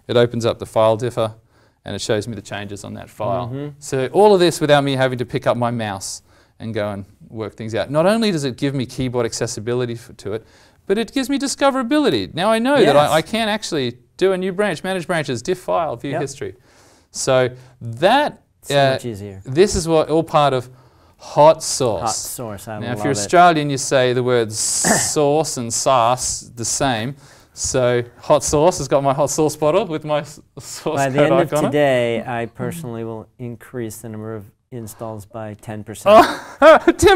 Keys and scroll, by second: 11.1 alt+m, 20.3 alt+Tab.